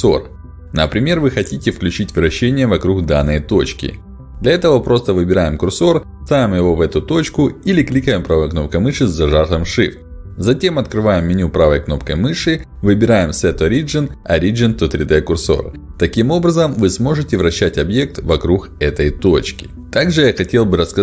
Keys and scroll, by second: 15.6 r.